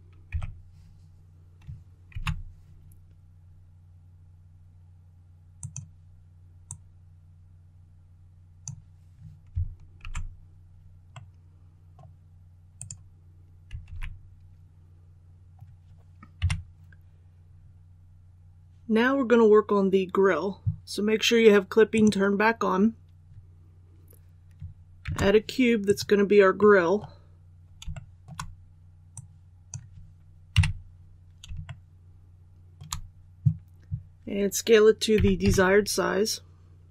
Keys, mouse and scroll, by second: 0.2 s, 2.0 shift+y, 5.5-9.1 drag, 9.9 alt+a, 11.0-12.1 middle drag, 12.7 right click, 13.7 alt+a, 15.1-15.9 scroll down 1, 16.3 KP_1, 17.4-20.7 scroll up 1, 21.8 click, 24.9 shift+a, 25.7 click, 26.5 middle click, 27.8 shift+middle click, 29.0-30.1 drag, 30.4 KP_1, 31.5 shift+middle click, 35.0 typing.